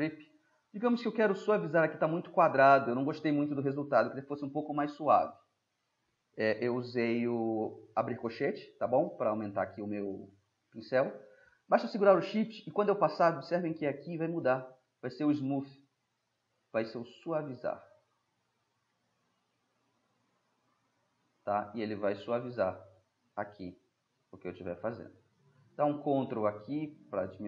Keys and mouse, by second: 0.6-2.0 middle drag, 2.4 middle click, 3.5 ], 15.6-19.0 drag, 19.0-22.7 middle drag, 24.7-26.0 middle drag, 26.1-27.1 middle drag, 27.1-27.4 drag.